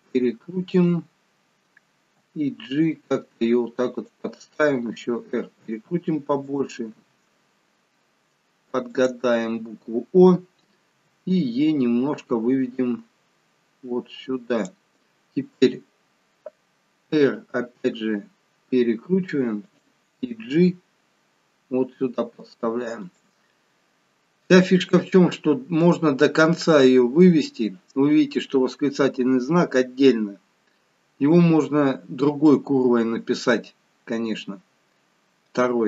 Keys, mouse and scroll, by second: 2.0 g, 4.8 r, 6.9 g, 10.9 e, 17.0 r, 20.4 g.